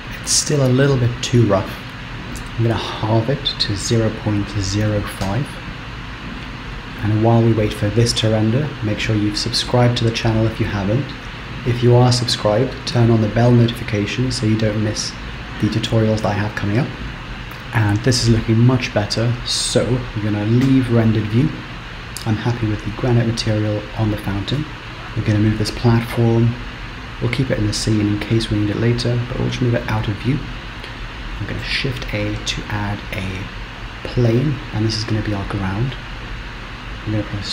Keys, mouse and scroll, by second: 25.3 g, 31.9 shift+a.